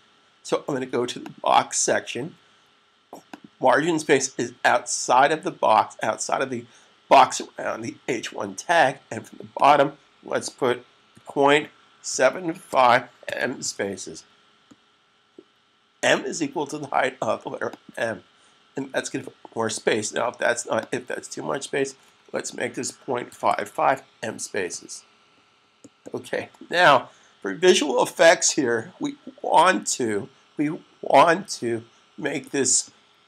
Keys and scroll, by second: 13.6 typing, 22.4-23.1 typing, 26.7 s, 29.6 typing.